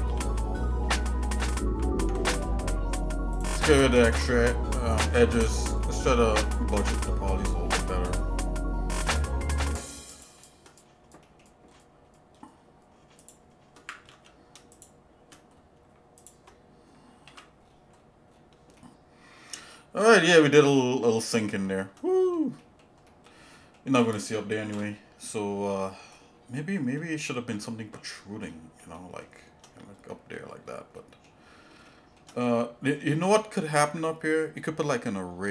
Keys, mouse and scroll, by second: 0.0 f, 1.0-1.4 scroll down 2, 1.5 scroll up 1, 1.9 ctrl+Tab, 4.1 ctrl+Tab, 5.5 click, 5.8 shift+middle click, 6.4 alt+shift+click, 8.2 scroll up 1, 10.1 shift+click, 10.7-11.2 scroll down 2, 11.2 middle click, 11.6-12.0 scroll up 2, 12.3 scroll up 1, 13.2 shift+click, 14.0 ctrl+z, 14.7 shift+click, 15.5-15.8 scroll up 2, 16.2 alt+shift+click, 17.2 ctrl+x, 17.6-18.2 scroll down 3, 18.3 scroll up 1, 18.8-19.8 shift+middle drag, 21.3 shift+middle click, 22.6 shift+middle click, 23.1 shift+middle click, 23.5 shift+middle click, 24.7 KP_Divide, 25.7 scroll down 1, 25.7 scroll up 1, 25.8 scroll down 1, 26.1-26.4 scroll up 2, 27.0 shift+middle click, 28.0 scroll down 1, 28.5 shift+middle click, 28.9 shift+middle click, 30.1 middle click, 30.6-30.9 scroll down 2, 30.9 middle click, 31.4-31.7 shift+scroll up 2, 31.8 shift+middle click, 32.5 scroll up 2, 32.9 middle click, 33.6 shift+middle click, 34.5 scroll up 1.